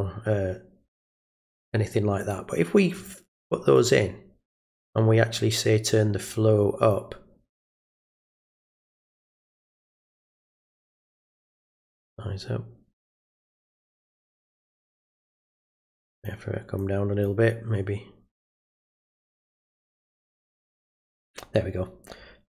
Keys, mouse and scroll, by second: 2.2 click, 2.9 click, 3.7 click, 6.3-6.9 drag, 8.3 click, 9.1 click, 11.5 click, 15.8 click, 16.8 click, 19.3 click.